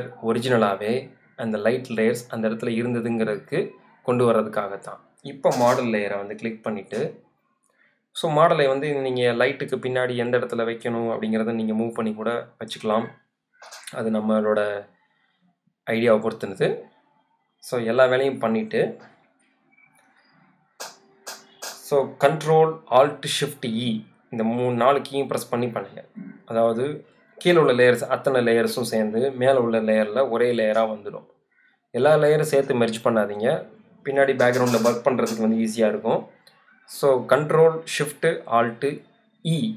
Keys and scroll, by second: 20.9 alt+shift+super+e.